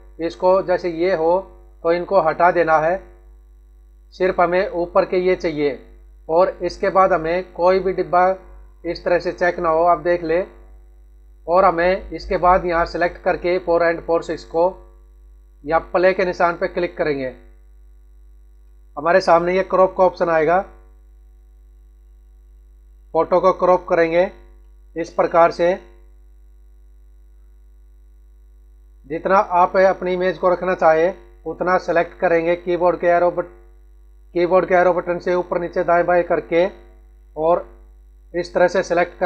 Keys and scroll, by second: 31.0 Up, 32.4 Right, 33.0 Left, 34.5 Up, 35.0 Right, 35.7 Down, 37.2 Left.